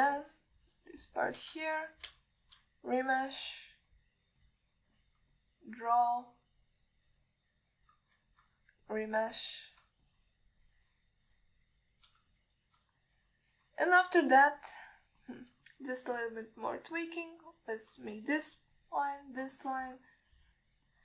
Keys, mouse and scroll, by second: 0.2 alt+middle drag, 0.7 shift+middle drag, 1.4-2.6 shift+drag, 2.9 shift+middle click, 3.4 shift+click, 4.2 click, 4.6 click, 5.7 alt+middle click, 6.2 alt+shift+middle click, 6.6 click, 7.2 click, 7.8 click, 8.5 alt+middle click, 9.5 ctrl+middle click, 10.1-11.0 drag, 11.3 shift+click, 11.9-13.3 shift+drag, 13.6 alt+middle click, 14.3 alt+shift+middle click, 14.7 middle click, 15.5 click, 16.5 alt+middle click, 16.9 ctrl+middle click, 17.4-18.0 drag, 18.2 alt+middle click, 18.7 click, 19.3 alt+shift+middle click, 20.0 click, 20.8 ctrl+middle click.